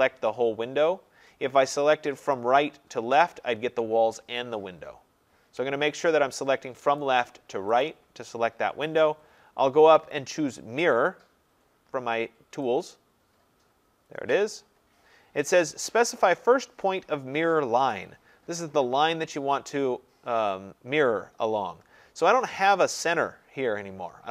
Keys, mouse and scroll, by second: 0.0 click, 1.1 Escape, 2.4 click, 3.3 click, 5.6 Escape, 7.1 click, 7.9 click, 13.0 click, 17.2-18.0 scroll, 20.5-21.3 scroll.